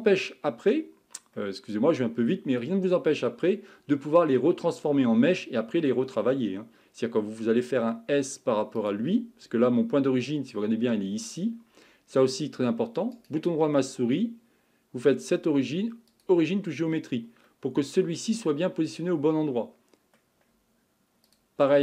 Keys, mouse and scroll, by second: 1.3-3.6 middle drag, 3.6-5.3 scroll up 5, 6.5-6.9 scroll down 1, 6.9-8.8 scroll up 1, 8.8 click, 9.4-10.7 scroll down 4, 11.5-13.1 scroll up 5, 13.1-16.3 right drag, 16.9-17.5 scroll down 3, 17.5-21.2 middle drag, 21.2 click.